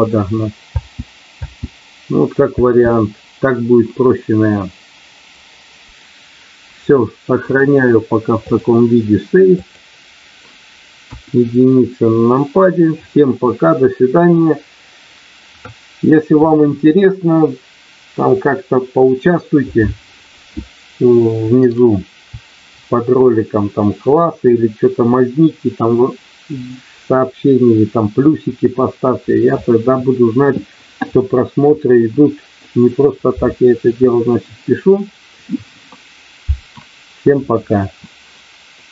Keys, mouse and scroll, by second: 0.6 space, 6.9 middle click, 8.4-9.8 drag, 11.0 KP_1.